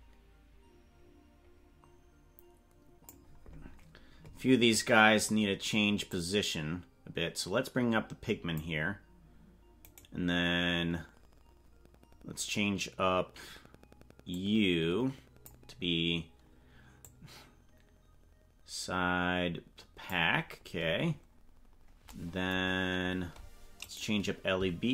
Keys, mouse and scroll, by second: 6.1-8.6 drag, 9.9 right click, 14.3-15.6 drag, 17.0-20.2 drag, 22.6-23.0 scroll down 3, 23.8 right click.